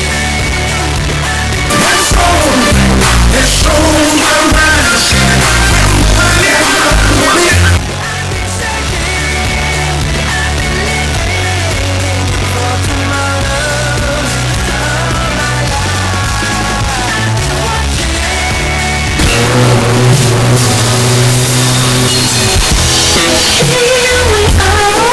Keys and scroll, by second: 7.7 Page_Down.